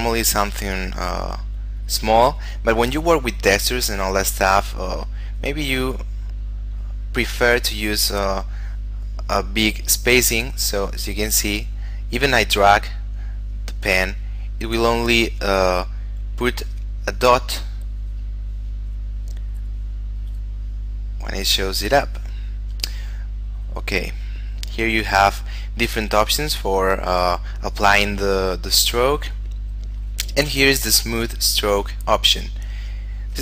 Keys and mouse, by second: 5.5 click, 18.0 click, 23.9 click, 30.3 click.